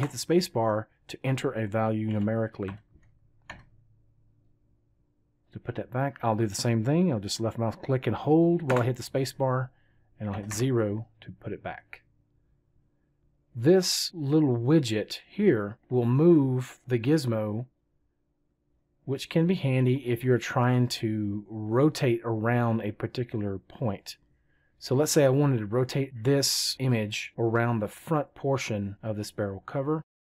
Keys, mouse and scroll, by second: 7.7-9.8 drag, 8.7 space.